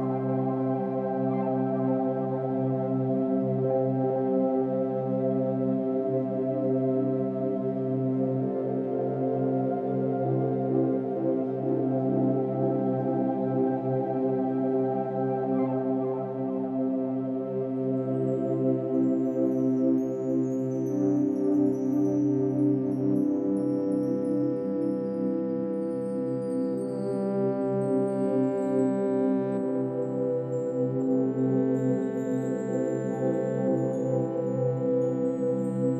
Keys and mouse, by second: 3.5-14.2 drag, 14.6-15.1 drag, 15.7 r, 16.1 z, 17.1-18.0 drag, 18.9 g, 19.2 x, 20.4-22.4 drag, 22.3 typing, 22.6-22.9 ctrl+alt+drag, 24.5-25.1 alt+shift+drag, 25.3-26.7 drag, 26.8 typing, 28.3 Escape, 28.8 click, 29.8 r, 30.1 x, 33.0 Escape, 34.2-35.9 alt+drag.